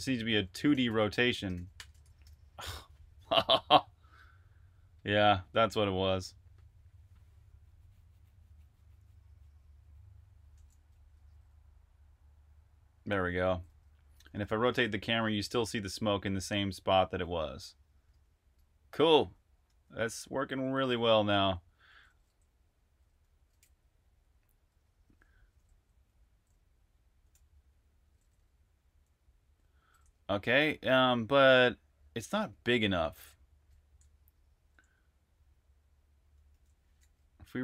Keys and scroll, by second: 0.0-3.2 typing, 2.1 super+r, 10.8-11.6 typing, 13.1-17.9 typing, 19.0-29.8 typing, 31.2-32.0 typing, 36.3 super+`.